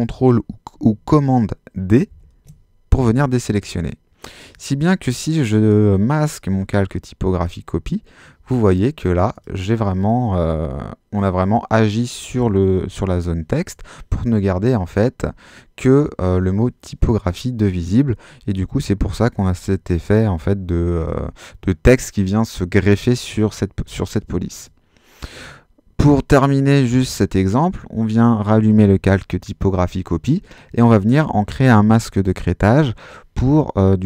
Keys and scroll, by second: 2.1 super+d.